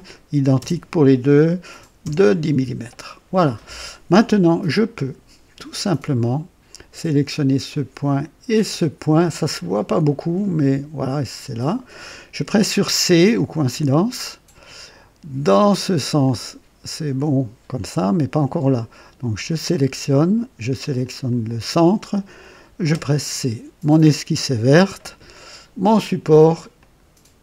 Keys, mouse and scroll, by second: 0.5 KP_0, 1.9 KP_Enter, 5.7 click, 8.4 click, 13.6 c, 16.1-17.9 drag, 19.4 click, 20.9 click, 21.5 typing, 22.8 typing, 26.7 click.